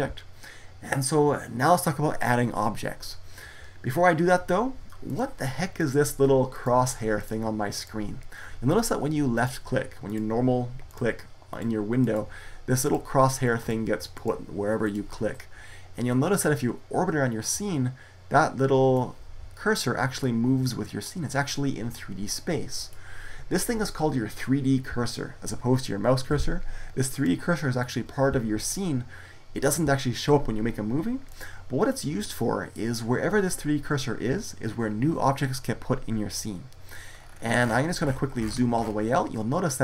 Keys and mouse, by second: 16.3-17.8 middle drag, 20.0-22.0 middle drag, 36.9 middle click.